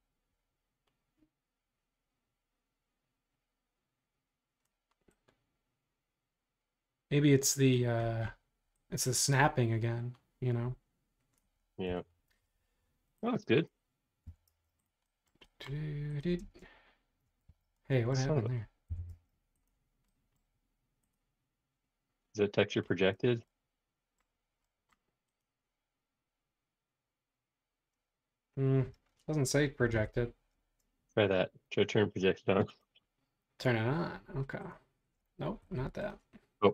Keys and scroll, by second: 11.9 Return, 12.3 space, 12.4 ↻, 14.2 b, 16.4 space, 17.5 super+z, 18.9 b, 23.1 space, 29.9 Escape, 35.6 Escape.